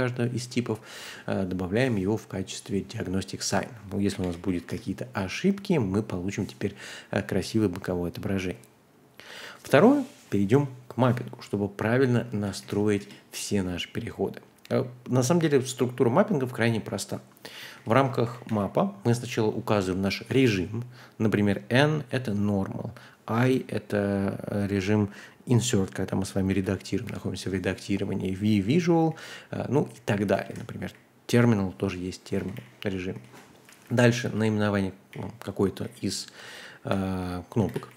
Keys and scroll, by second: 3.9-4.9 typing, 11.8 j, 12.3 ctrl+h, 12.6 k, 13.0 Return, 13.9-15.8 typing, 17.3-18.9 typing, 26.5-27.5 typing, 28.9-37.9 typing.